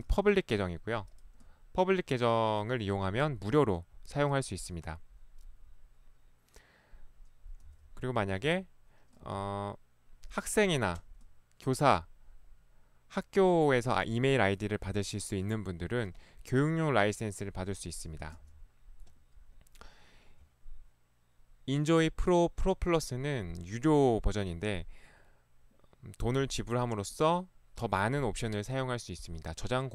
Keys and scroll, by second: 1.5 ctrl+1, 7.7 e, 8.5 ctrl+1, 9.4 ctrl+1, 18.3 e, 18.5 ctrl+1.